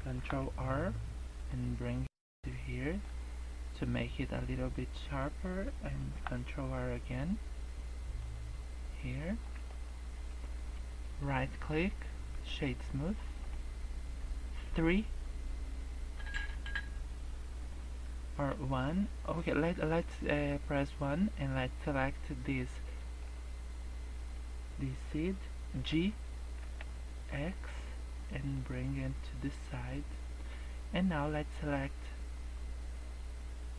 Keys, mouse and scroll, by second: 0.1 ctrl+r, 6.1 ctrl+r, 9.6 Tab, 9.6 scroll down 2, 9.9 middle click, 11.2 right click, 12.8 middle click, 14.6 KP_3, 18.3 KP_1, 19.9 scroll down 2, 20.2-20.9 scroll up 2, 21.1 scroll down 1, 23.1 click, 25.7 g, 29.1-29.8 scroll down 6, 29.8 scroll up 3.